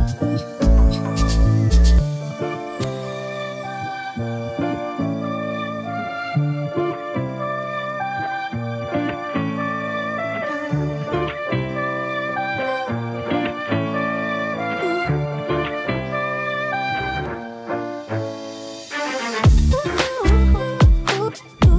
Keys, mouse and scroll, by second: 0.7 click, 2.9 click, 2.9 right click, 3.0 click, 4.3 click, 10.6 click, 13.2 click, 14.9 click, 16.6 click, 17.7-18.8 drag.